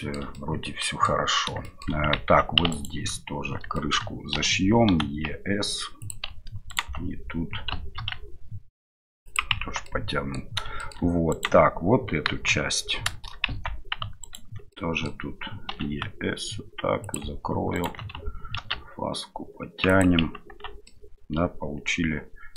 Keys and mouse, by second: 0.3 middle drag, 0.7 middle click, 1.6 shift+middle drag, 9.6 Tab, 10.8 shift+middle click, 12.3 KP_1, 14.7 middle click, 15.7 e, 17.7 right click, 18.6 ctrl+b, 20.5 Tab, 20.8 middle drag.